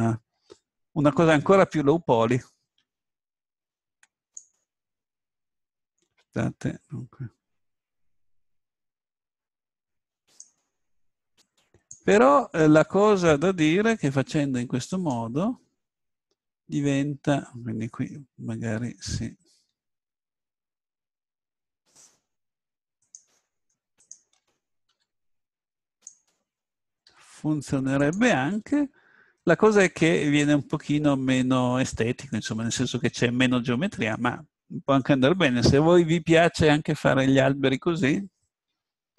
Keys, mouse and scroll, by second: 3.6 ctrl+r, 10.4 click, 11.3 click, 11.3 right click, 12.4 click, 14.9-16.8 drag, 21.8-26.0 drag, 24.9 s, 26.1-27.3 drag, 27.1 g, 27.3 click, 27.9 click, 28.1 click, 28.7-30.0 middle drag, 30.7 click, 35.3 middle click.